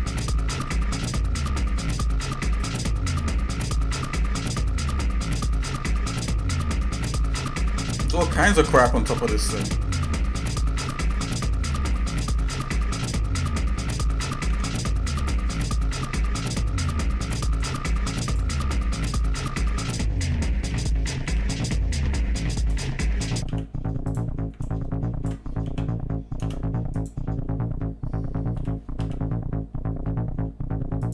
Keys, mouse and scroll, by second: 0.1 g, 3.1-3.9 scroll down 3, 4.1 shift+middle click, 5.0 middle click, 5.4 scroll down 1, 5.8 shift+middle click, 7.0 middle click, 7.4-7.7 scroll down 2, 7.8 shift+middle click, 8.5 scroll up 1, 8.5 scroll down 1, 9.1 shift+middle click, 9.9 middle click, 10.5 middle click, 10.5-11.3 scroll up 4, 11.5 middle click, 12.2 middle click, 12.8-13.8 shift+middle drag, 14.0 middle click, 14.5 ctrl+Tab, 15.6 shift+middle click, 16.9 ctrl+click, 17.6 ctrl+right click, 20.2 g, 23.8 z, 24.7 ctrl+right click, 25.6 z, 26.5 z, 28.6 g.